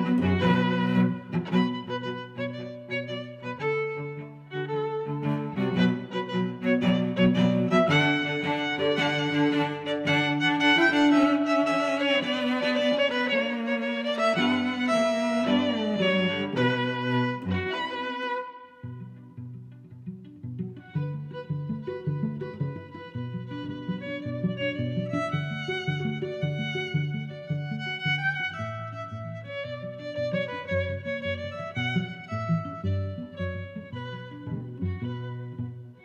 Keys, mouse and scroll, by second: 0.9 middle click, 1.8 click, 2.0 middle click, 3.1 shift+Tab, 4.2 click, 5.4 click, 5.4 2, 6.0 middle click, 6.5 middle click, 7.8 click, 10.3 click, 11.1 click, 19.4 Tab, 19.9 middle click, 20.8 click, 21.3 click, 21.9 middle click, 24.9 middle click, 25.7 middle click, 26.8 click, 28.5 middle click, 30.4 middle click, 31.6 middle click, 32.8 middle click, 33.7 click.